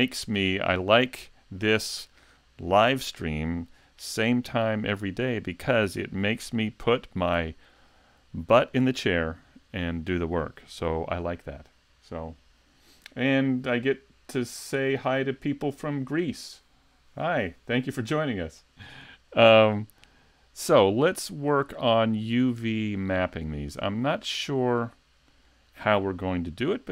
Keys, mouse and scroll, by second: 20.2 shift+middle click.